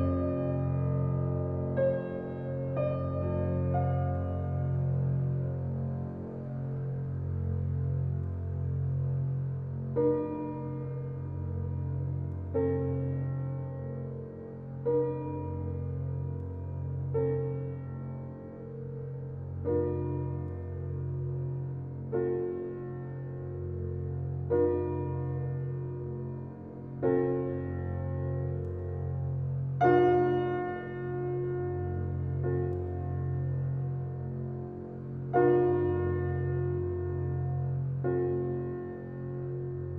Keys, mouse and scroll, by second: 3.7-10.0 drag, 19.5 ctrl+alt+scroll down 1, 20.5 ctrl+alt+scroll, 20.6 ctrl+alt+scroll up 1, 21.1 ctrl+alt+scroll up 1, 21.6-23.0 alt+right drag, 23.0 alt+click, 24.9 ctrl+alt+z, 26.0 alt+click, 35.4 click, 36.6 ctrl+alt+z, 37.0-38.4 alt+right drag, 38.4 alt+click.